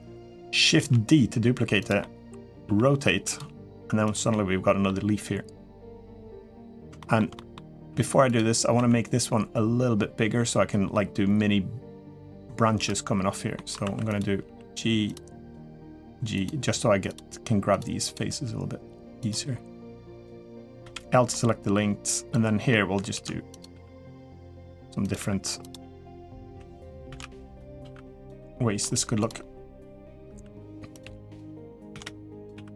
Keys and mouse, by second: 0.5 shift+d, 1.8 middle click, 2.4 r, 3.2 g, 4.1 middle click, 6.8 shift+middle click, 7.1 middle click, 7.7 3, 8.0 click, 8.5 s, 13.3 middle click, 13.6 2, 14.2 g, 15.6 g, 16.8 click, 17.1 g, 17.8 click, 18.0 g, 19.9 click, 20.6 l, 21.1-22.5 middle drag, 22.9 shift+d, 23.5 r, 24.2 g, 24.9 r, 26.3 r, 26.9 shift+d, 27.6 r, 28.2 middle click, 28.7-32.7 typing, 29.2 middle click, 31.3 click.